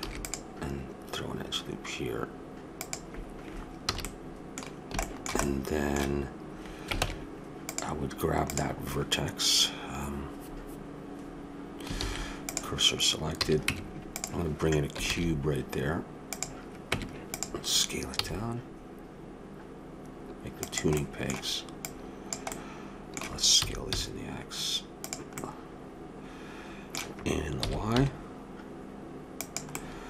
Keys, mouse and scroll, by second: 0.0 ctrl+r, 3.9 a, 4.0 middle click, 7.0 ctrl+Tab, 8.4-10.3 drag, 12.0 shift+s, 13.4 a, 13.7 Tab, 15.0 shift+a, 16.8 Tab, 18.1 s, 21.0 middle click, 21.8-23.6 drag, 23.5 s, 24.4-25.4 drag, 27.6 s.